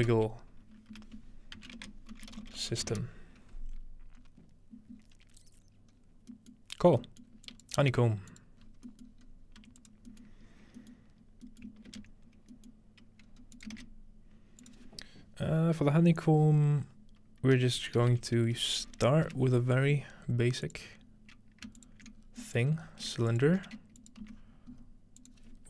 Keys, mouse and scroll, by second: 0.0-0.5 typing, 0.9 F2, 1.8-3.4 typing, 4.2 scroll up 2, 5.0 scroll down 2, 5.9-7.5 scroll down 4, 7.5 click, 7.8 g, 8.3 click, 8.6-11.7 scroll up 2, 8.7-9.8 drag, 9.6 typing, 9.9-11.5 drag, 11.9 ctrl+space, 13.3-13.8 scroll up 1, 13.6-16.6 shift+drag, 13.8 shift+a, 17.6-18.5 typing, 19.3 Return, 20.7-24.1 drag, 21.0-21.7 scroll up 1, 21.7-22.2 ctrl+shift+scroll up 1, 22.2 scroll down 1, 22.5-24.1 middle drag, 24.2 alt+shift+x, 24.7-25.6 scroll up 1, 25.2 click.